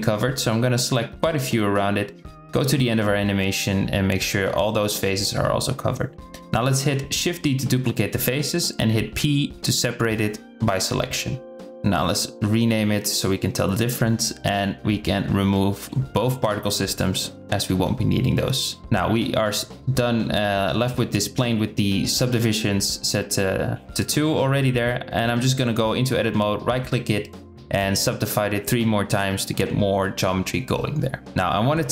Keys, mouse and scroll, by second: 2.4 click, 3.3 c, 5.5 KP_0, 5.9 shift+d, 7.8 p, 9.3 Tab, 11.2 click, 11.5 click, 17.2 click, 20.4 drag, 20.7 Tab, 21.2 Tab, 21.5 click, 23.3 Tab, 24.6 Tab, 25.1 a, 26.5 click, 27.5 click, 28.1-29.2 drag, 29.2 Tab, 30.8 Tab.